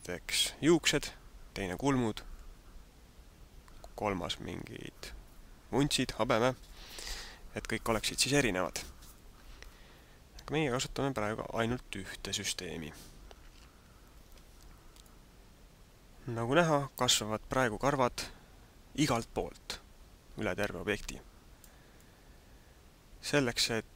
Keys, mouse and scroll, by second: 15.1 middle click, 21.9 middle click.